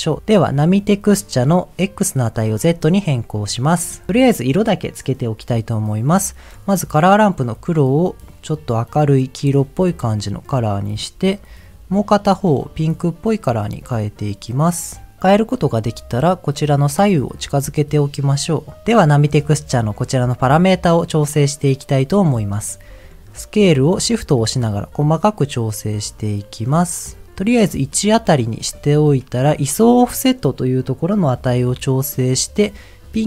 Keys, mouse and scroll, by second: 0.2-0.9 scroll up 3, 1.7 click, 7.0 click, 12.0 click, 12.5 click, 15.6 click, 17.0-18.5 drag, 23.9-27.3 shift+drag, 31.4-33.2 shift+drag.